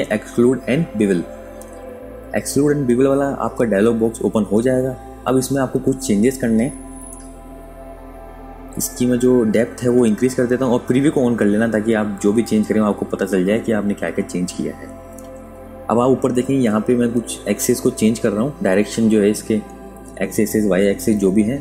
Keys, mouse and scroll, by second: 14.0 KP_Subtract, 14.3 KP_Add.